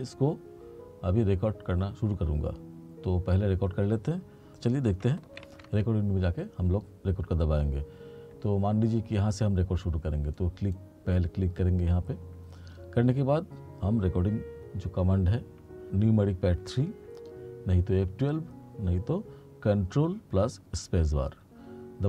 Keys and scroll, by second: 5.5 ctrl+=.